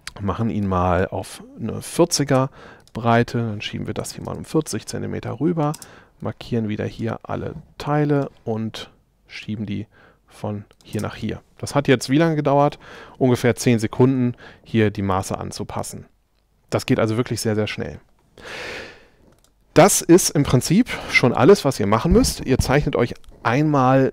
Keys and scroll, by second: 2.4 m, 3.8-4.7 typing, 5.8 space, 11.0 space.